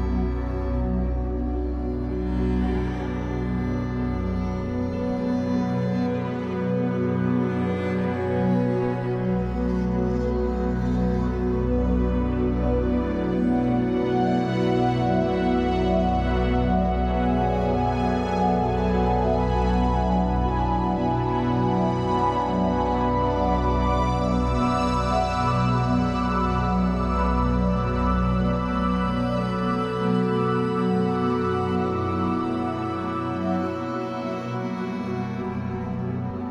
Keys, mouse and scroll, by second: 1.8 scroll down 2, 3.5-5.2 drag, 5.2-13.9 middle drag, 5.6 ', 6.3 Tab, 7.1 l, 8.1 alt+n, 11.4 scroll up 1, 12.1 scroll down 1, 15.4 click, 15.5-15.8 scroll up 2, 15.8-17.8 middle drag, 16.1 scroll up 2, 17.8 alt+click, 18.2 middle click, 19.0 alt+shift+click, 19.4-21.3 middle drag, 20.2 scroll up 2, 21.3 alt+shift+click, 21.6 scroll down 2, 21.8-25.0 middle drag, 25.0 click, 26.6-33.0 middle drag, 27.9 Tab, 28.2-28.6 scroll down 2, 28.8 scroll up 2, 29.9 scroll up 2, 31.1 Tab, 33.0-34.2 drag, 34.2-35.7 shift+middle drag, 34.5 scroll up 2, 35.7 ctrl+click, 36.3 middle click.